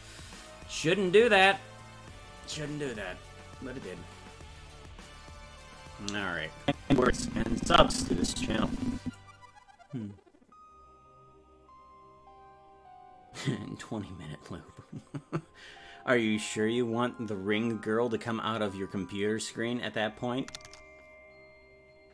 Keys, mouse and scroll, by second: 6.6-9.2 drag.